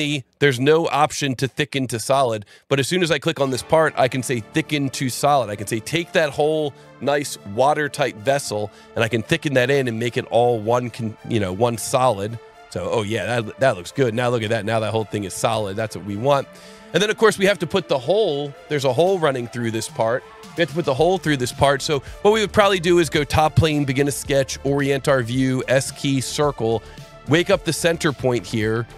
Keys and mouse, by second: 2.6 click, 5.7 click, 11.9 click, 13.5 click, 15.4 Escape, 16.1 click, 18.6 click, 19.5 click, 22.5 click, 23.2 click, 24.0 ctrl+8, 24.6 s, 26.0 click.